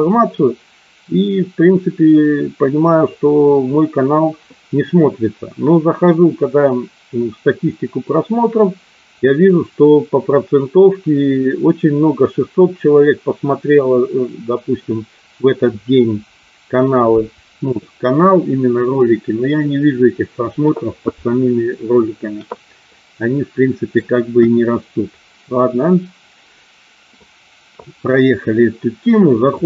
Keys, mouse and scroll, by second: 22.9 middle click, 24.3 KP_1.